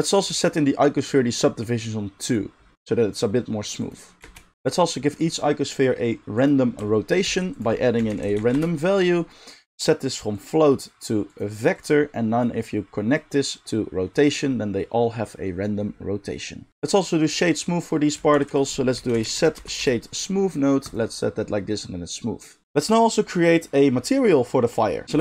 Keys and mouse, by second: 4.2 space, 6.4-10.4 middle drag, 6.4-10.4 right drag, 7.2 shift+a, 18.3 shift+a, 20.9-25.2 right drag, 22.4-25.2 drag, 22.4-25.2 middle drag, 25.0 shift+a.